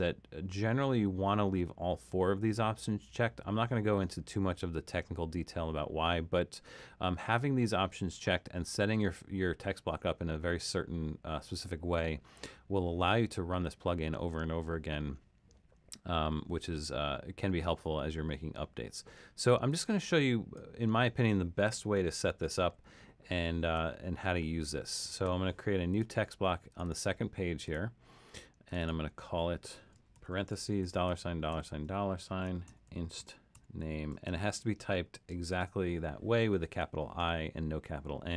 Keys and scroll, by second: 22.6 super+=, 23.5 super+=, 30.2-35.5 typing.